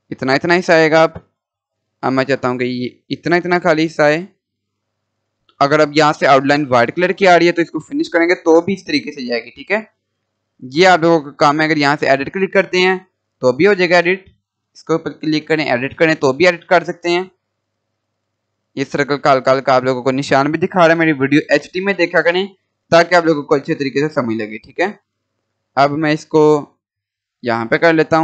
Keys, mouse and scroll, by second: 0.8 scroll up 1, 1.6-5.3 drag, 5.0 scroll up 1, 7.6 click, 8.7-9.3 scroll down 1, 12.2-12.6 scroll up 1, 13.3 click, 19.3 scroll up 1, 20.2-20.6 scroll down 1, 22.1-25.4 drag, 25.4-25.8 scroll up 1, 26.7-28.2 drag.